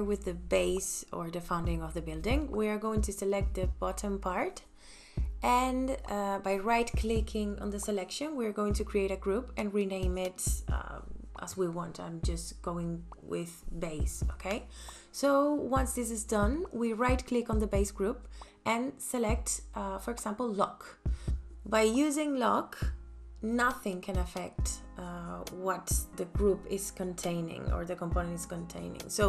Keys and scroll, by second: 10.7-12.0 typing, 12.1 Return, 23.8 p.